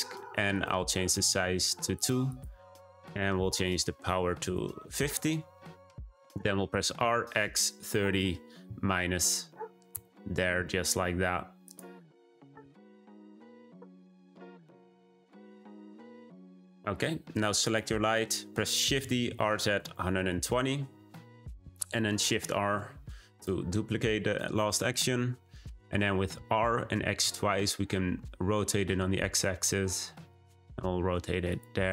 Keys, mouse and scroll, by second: 2.2-5.2 drag, 6.3 r, 11.6 click, 17.6 click, 18.8 shift+d, 22.2 shift+r, 23.3 click, 23.9-24.8 scroll down 1, 24.8 click, 26.3 r, 31.4 click, 31.8 r.